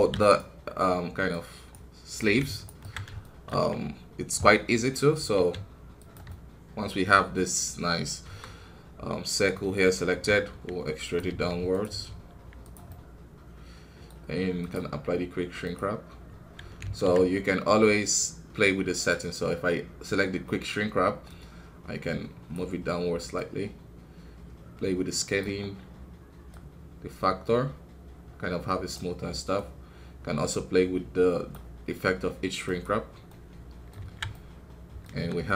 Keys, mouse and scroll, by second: 0.3-3.2 right drag, 3.2-5.3 shift+middle drag, 5.3 s, 6.2-8.2 middle drag, 8.2 KP_1, 10.0 e, 12.8-14.6 middle drag, 14.6-16.8 drag, 16.8 ctrl+z, 19.1-22.1 drag, 33.2 middle click, 34.0 alt+a, 34.3 middle click, 35.1 KP_1, 35.4 scroll down 1.